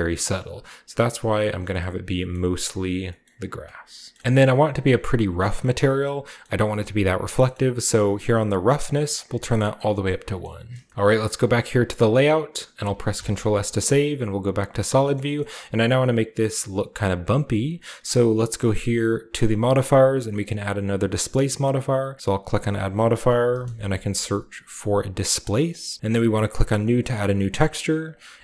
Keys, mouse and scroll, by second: 0.0-0.5 scroll up 2, 0.6 click, 2.3 scroll up 1, 3.1-3.8 scroll up 1, 3.4 click, 3.8 scroll down 1, 4.2 typing, 4.8 scroll up 1, 5.8-6.8 scroll up 3, 8.2 click, 9.1 click, 10.8 shift+scroll up 1, 10.9 ctrl+b, 12.2-14.0 middle drag, 13.1 ctrl+s, 13.8 z, 14.3 z, 14.4 z, 14.5 z, 15.2-16.9 shift+middle drag, 15.3-16.4 shift+scroll up 1, 16.9 typing, 17.5 scroll down 2, 19.3 click, 20.4 click, 22.2 click, 23.4 typing, 25.4 drag, 25.7-26.9 drag, 27.1-28.4 drag.